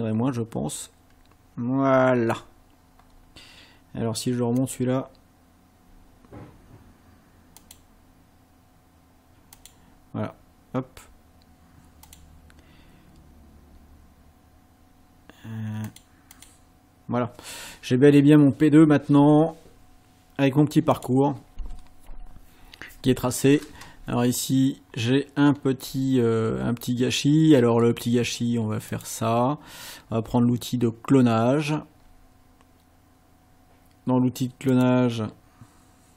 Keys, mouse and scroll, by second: 4.6 click, 7.6 click, 9.6 click, 12.1 click, 15.9 click, 16.3 click, 18.1 scroll down 2, 21.0 click, 24.3 ctrl+scroll up 2, 24.9 ctrl+scroll up 2, 25.5 ctrl+scroll up 2, 28.9 click, 34.7 click.